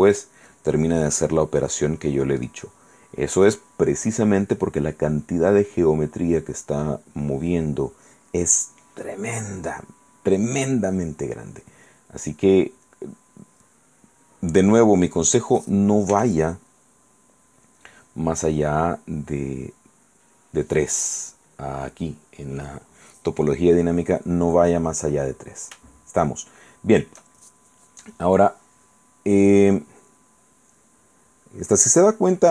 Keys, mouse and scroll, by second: 5.1-6.7 drag, 11.2 click, 12.1-13.2 drag, 16.3 f, 17.9 click, 18.8-20.7 drag, 26.3-27.4 shift+drag, 29.7-32.5 drag.